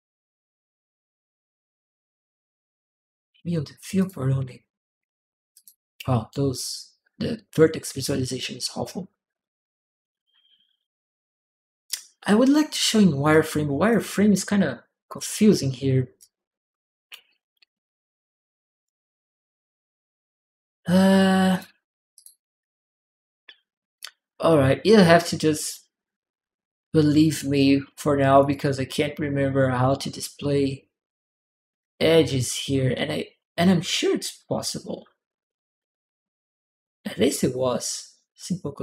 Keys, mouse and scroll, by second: 3.8 click, 5.3 click, 11.6-12.7 drag, 11.7-13.7 right drag, 13.1 click, 14.9 click, 16.0 click, 16.0-18.0 right drag, 18.0 click, 21.3 click, 21.9 click, 28.2 click, 29.4 click, 38.6 click.